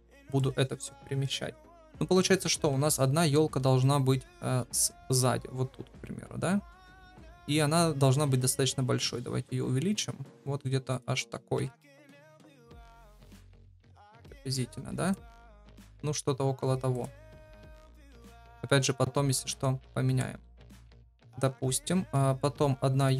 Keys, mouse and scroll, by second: 0.0-2.4 middle drag, 2.4 KP_7, 4.7 g, 8.2 s, 11.5 KP_1, 12.2 middle click, 12.9 g, 14.2 KP_0, 20.4 KP_7, 22.5 shift+d.